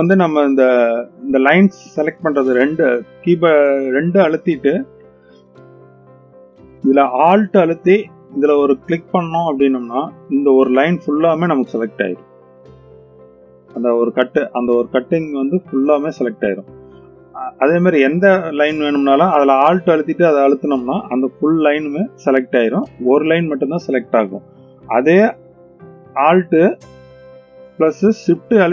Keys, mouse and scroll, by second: 3.0 click, 5.0 2, 10.0 alt+click, 11.5-16.1 middle drag, 16.3-17.0 middle drag, 19.6 alt+click, 21.1-22.2 middle drag.